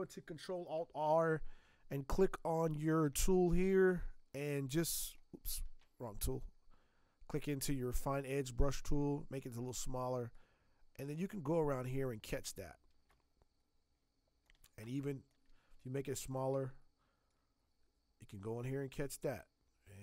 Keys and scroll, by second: 5.6 ctrl+z, 13.0 space, 14.8 space.